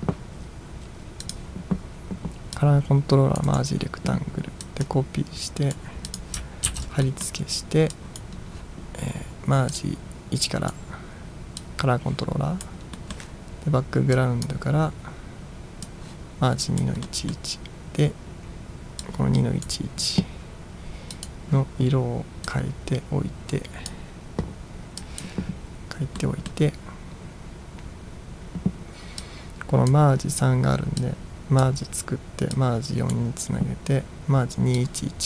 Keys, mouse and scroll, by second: 1.3 click, 2.7-3.6 drag, 3.6 right click, 4.7-6.0 drag, 6.2 click, 6.8 ctrl+v, 7.2 middle click, 8.0 drag, 9.8-10.8 drag, 11.7-12.7 drag, 13.0 middle drag, 14.2-14.6 drag, 15.9 click, 17.1-17.5 middle drag, 19.2-19.7 drag, 21.2 click, 22.6-24.0 drag, 25.1 drag, 26.2-26.6 middle drag, 29.2-29.9 drag, 29.6 middle click, 31.0-31.8 drag, 32.6-33.2 drag, 34.8-35.2 drag.